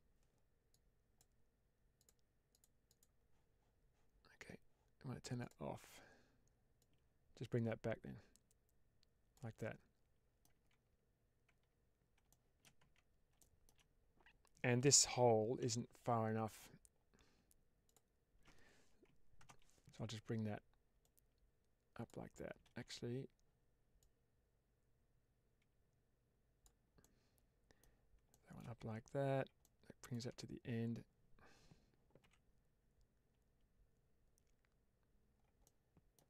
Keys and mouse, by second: 0.6 click, 1.9 click, 2.4 click, 2.8 click, 5.3 click, 6.7-9.2 drag, 9.6 middle click, 10.4 Tab, 11.4 Tab, 12.2 middle drag, 12.7 Tab, 13.4 shift+middle click, 15.5 3, 17.7 ctrl+alt+click, 19.3 ctrl+KP_Add, 20.9-21.9 drag, 22.5 ctrl+z, 23.9-26.5 drag, 27.0 middle click, 28.3 shift+middle click, 28.7 Tab, 29.5-30.0 middle drag, 30.2 Tab, 32.1 1, 35.6 middle click.